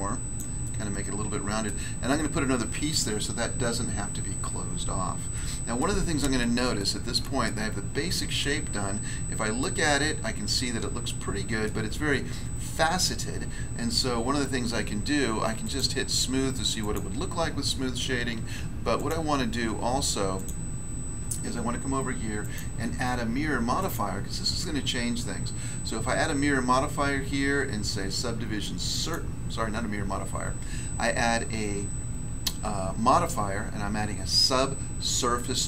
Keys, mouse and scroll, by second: 0.3 click, 0.6 middle click, 1.6 middle click, 4.4 scroll down 1, 5.3 middle click, 5.8 middle click, 6.0-6.8 scroll down 1, 6.8 shift+middle click, 6.8-7.4 scroll down 1, 7.4 shift+middle click, 8.9 Tab, 11.6 middle click, 15.6 click, 16.8 click, 18.9 click, 20.3 click, 22.4 click, 23.8 click, 28.9 click.